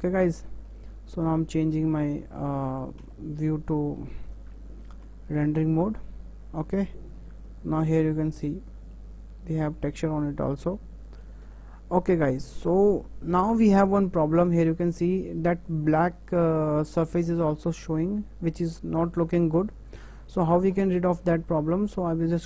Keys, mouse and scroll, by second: 0.3-1.7 shift+middle drag, 1.7 click, 3.1 Tab, 4.9 alt+h, 6.9 KP_0, 7.4-8.2 middle drag, 8.3-10.5 middle drag, 10.5 scroll down 1, 10.8 middle click, 11.0 middle click, 11.6 KP_0, 20.0 click.